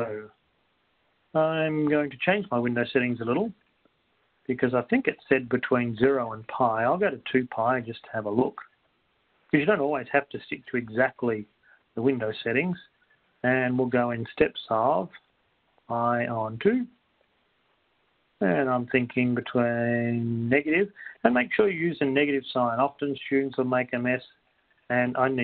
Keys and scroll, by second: 4.6 Down, 4.6 x, 6.4-8.1 typing, 13.8 Down, 13.8 ^, 15.6 ^, 16.9-17.6 typing, 18.6 Down, 22.7 ÷, 23.1 3, 25.3 Down.